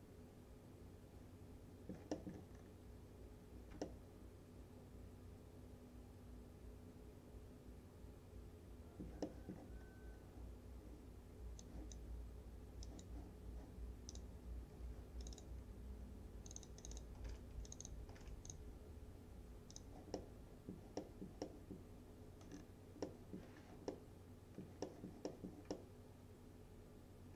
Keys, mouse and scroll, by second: 2.2 middle click, 2.6-3.5 scroll up 1, 3.9-9.2 alt+middle drag, 9.3 middle click, 9.9 scroll up 1, 11.7-12.3 click, 17.0-18.7 typing, 17.7 click, 18.5 click, 20.2-20.8 middle click, 22.6 scroll down 1, 23.1 middle click, 23.6 scroll down 1, 23.9 alt+scroll up 1, 24.0-24.9 alt+middle click, 25.8-27.3 alt+middle drag.